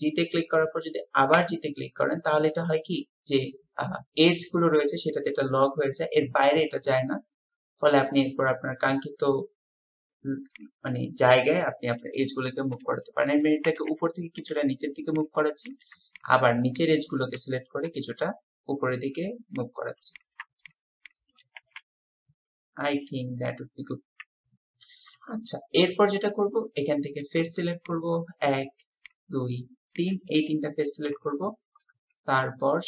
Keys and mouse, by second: 12.2-13.3 middle drag, 16.1 shift+click, 16.7 shift+click, 17.2 click, 20.6 shift+click, 21.1-21.4 shift+drag, 21.6 g, 23.9-25.1 drag, 26.2 click, 26.8 click, 27.9 click, 30.4 click, 31.3 shift+click, 32.1 click.